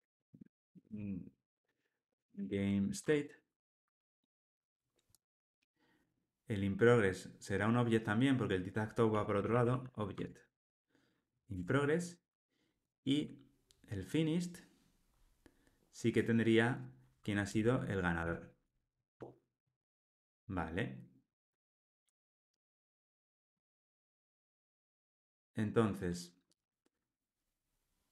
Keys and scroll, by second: 3.0 Tab, 10.2 Tab, 11.5 Tab, 18.2 alt+Return, 19.1 alt+super+l, 19.5 ctrl+alt+o.